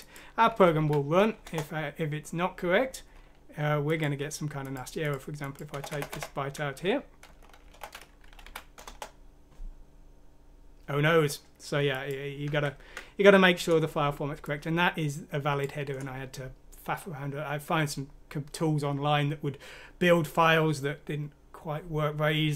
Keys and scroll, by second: 0.7 F6, 1.4 Return, 5.7 BackSpace, 5.9 BackSpace, 6.1 BackSpace, 7.6-9.7 typing, 8.4 F6, 8.8 Return, 12.5 ctrl+z.